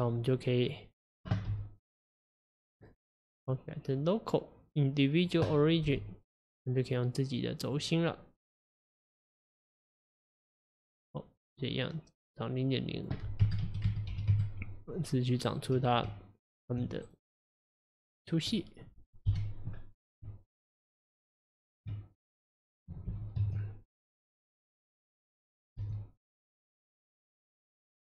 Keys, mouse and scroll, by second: 0.4 click, 1.5 s, 3.5-5.9 drag, 5.9 s, 8.4 click, 10.1-13.0 middle drag, 13.0-15.5 drag, 15.5 right click, 15.9 click, 16.1 Tab, 17.1 right click, 18.6 middle click, 19.3 KP_1, 20.3 Tab, 22.2 click, 23.1 g, 25.8 s.